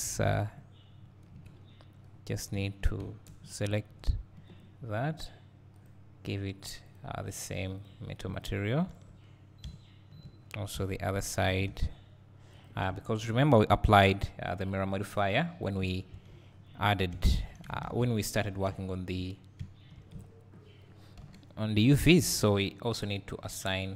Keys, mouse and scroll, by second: 0.4 click, 1.3 KP_Decimal, 2.0-2.3 scroll down 1, 2.6 `, 3.9 ctrl+KP_Add, 5.9-8.9 drag, 8.9 Tab, 9.2-9.5 scroll down 1, 9.6 `, 10.4-10.8 scroll down 2, 11.7 Tab, 12.0-12.6 scroll up 1, 12.6 click, 13.4 ctrl+KP_Add, 15.8 click, 16.2 Tab, 16.5 scroll down 1, 17.1 `, 20.1-20.4 drag, 21.2 h, 21.8 click, 21.9 Tab.